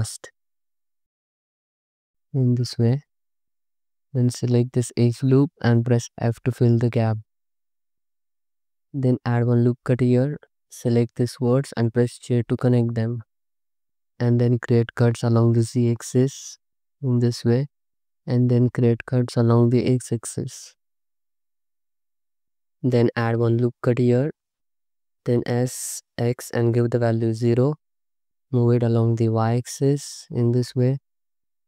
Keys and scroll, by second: 2.3 m, 3.9 2, 5.9 f, 8.6 ctrl+r, 9.6 1, 12.0 j, 13.9-16.9 typing, 18.3-20.6 typing, 22.4 ctrl+r, 25.7 s, 26.1 x, 27.3 0.